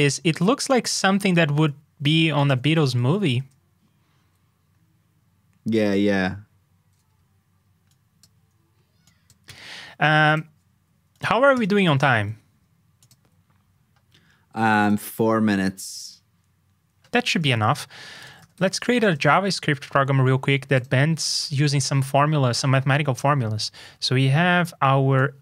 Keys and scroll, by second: 2.9 super+v, 11.9 super+s, 19.8 super+b.